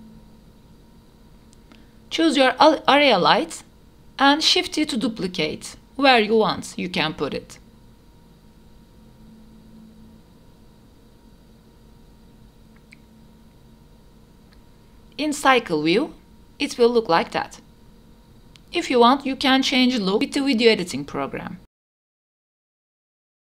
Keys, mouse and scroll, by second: 1.0-1.5 scroll up 12, 1.5 click, 2.9 shift+d, 4.8 shift+d, 6.9 shift+d, 8.7 shift+d, 10.5-12.1 typing, 10.6 shift+middle click, 11.0 shift+middle click, 14.3 click, 16.5 click, 19.7 click.